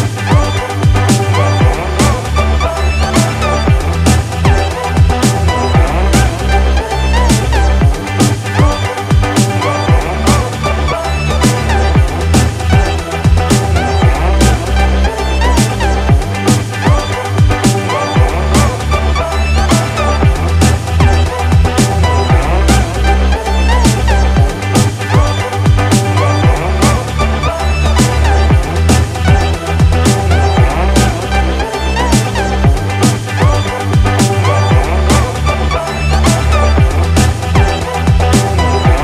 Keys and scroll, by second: 11.7 ctrl+-, 11.8 ctrl+=, 12.9 ctrl+-, 13.5 ctrl+=, 13.9 ctrl+-, 14.6 ctrl+-, 16.5 ctrl+=, 17.6 ctrl+-, 18.4 ctrl+=, 19.5 ctrl+-, 19.8 ctrl+=, 20.3 ctrl+-, 20.5 ctrl+=, 21.0 ctrl+-, 22.4 ctrl+=, 23.1 ctrl+z, 25.3 ctrl+-, 25.4 ctrl+=, 27.1 ctrl+-, 27.4 ctrl+=, 29.0 ctrl+-, 29.3 ctrl+=, 32.0 ctrl+-, 32.1 ctrl+=, 35.7 ctrl+-, 35.9 ctrl+=, 36.1 ctrl+space, 36.7 ctrl+=, 37.1 ctrl+-.